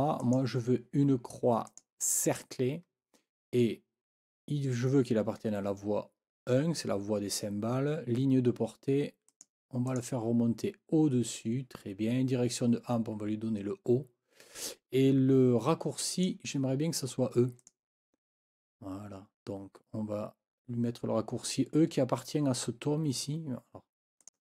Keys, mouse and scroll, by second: 0.2 click, 1.7 click, 9.3 click, 9.9 click, 16.1 click, 17.6 click, 24.2 click.